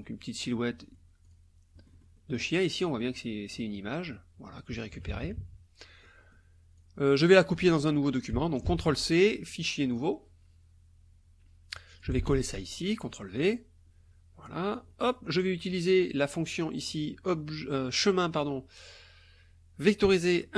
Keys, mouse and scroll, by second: 0.4 click, 0.7 click, 1.3 click, 1.8 click, 2.7 click, 4.9 KP_Subtract, 6.0 click, 6.8 click, 8.6 ctrl+c, 9.6 click, 9.9 click, 11.9 ctrl+click, 12.2 ctrl+v, 13.4-15.9 drag, 16.5 click.